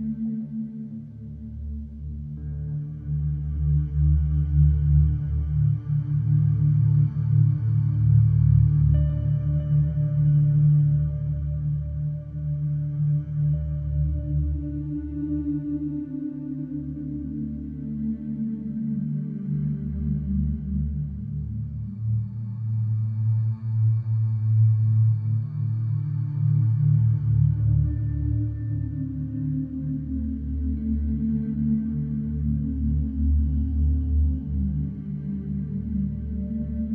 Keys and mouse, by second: 0.1-0.5 typing, 1.5-17.7 drag, 6.0 ctrl+t, 11.9 typing, 17.7 typing, 19.4 click, 20.2 click, 21.1 click, 21.4 click, 21.9 click, 22.3 click, 23.2-23.6 typing, 24.8 click, 25.7 click, 26.4-27.6 drag, 28.8-36.9 drag, 30.7-31.4 typing.